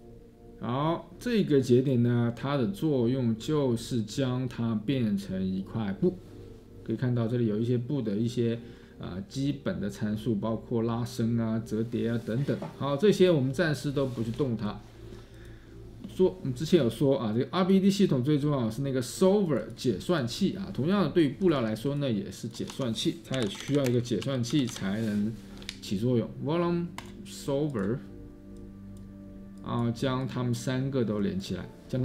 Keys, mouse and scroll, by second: 22.7 Tab, 23.3-26.8 typing.